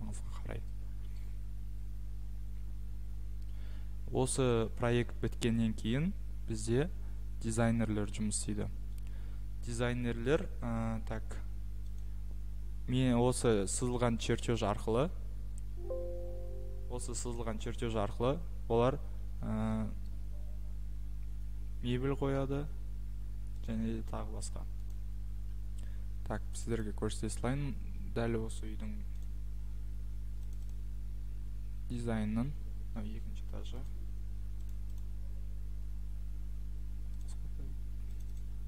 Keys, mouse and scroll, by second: 10.4 click, 12.0 click, 13.8 click, 20.1-20.7 scroll, 21.2-21.6 scroll, 22.3-22.6 scroll, 23.7 click, 25.0-25.5 scroll, 26.7 click.